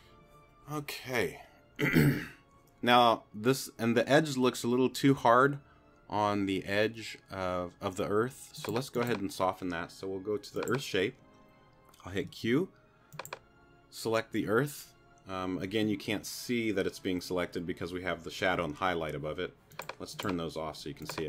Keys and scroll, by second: 12.2 q.